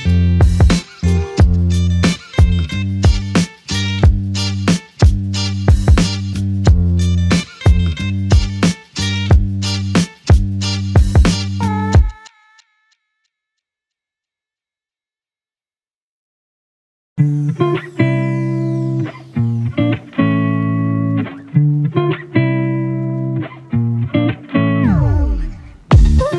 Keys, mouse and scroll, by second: 1.0 f, 2.5 alt+click, 4.5 double click, 8.5 alt+click, 13.3 double click, 15.0 click, 15.1 alt+click, 18.3 double click, 19.1 alt+click, 22.3 double click, 24.7 alt+click.